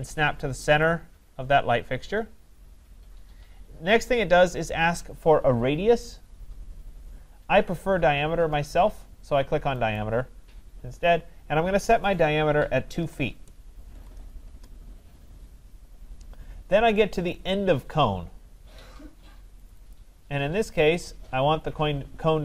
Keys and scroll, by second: 14.4 Return.